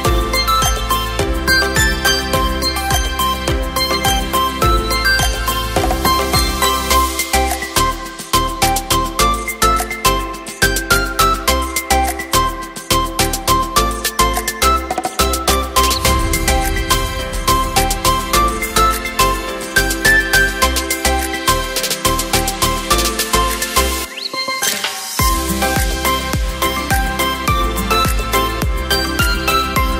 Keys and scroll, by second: 5.1 KP_0, 10.0 z, 11.9 v.